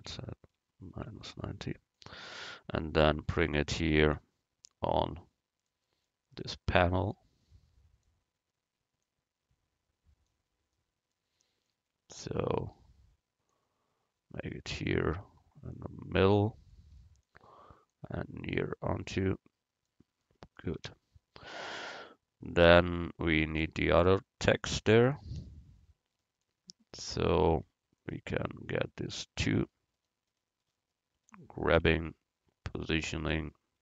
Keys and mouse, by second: 2.4-4.2 drag, 4.2 middle click, 5.1 click, 5.7 middle click, 6.8-8.1 middle drag, 8.1 click, 9.1-10.6 drag, 10.6 middle click, 16.8 click, 17.6-19.9 middle drag, 17.9-19.9 drag, 20.3 middle click, 20.8 a, 28.1-30.5 right drag, 30.8-33.0 middle drag, 32.0 g.